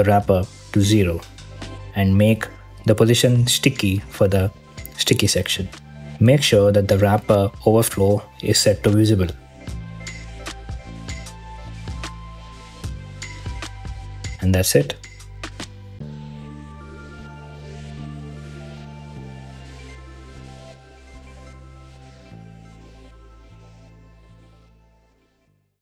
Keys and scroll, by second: 0.6 0, 1.0 Return, 4.7 h, 4.9 Return, 15.9 1, 16.3 Return.